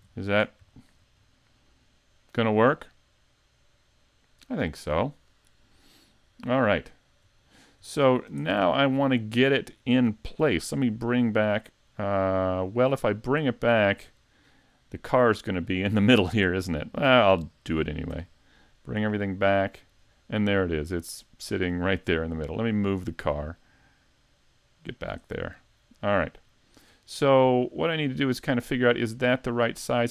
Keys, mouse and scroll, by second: 0.7 shift+middle click, 1.2 middle click, 6.8-7.4 scroll down 2, 7.4 shift+middle click, 8.5 shift+middle click, 14.5-17.7 scroll down 4, 18.1 `, 18.7-19.1 scroll down 3, 19.1 middle click, 20.0-21.1 scroll up 2, 21.1 middle click, 21.1 scroll up 1, 22.1 scroll down 1, 22.5 right click, 24.1 click, 25.7 middle click, 27.2 scroll up 3, 27.6 shift+middle click, 28.3 scroll up 2, 28.9 middle click.